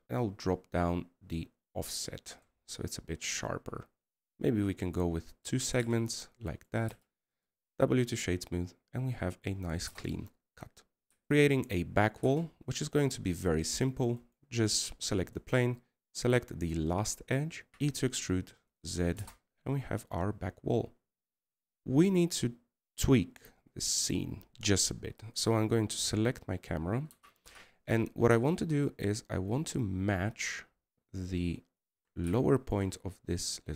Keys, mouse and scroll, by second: 14.4-15.2 scroll down 1, 21.0 d, 22.8 middle click.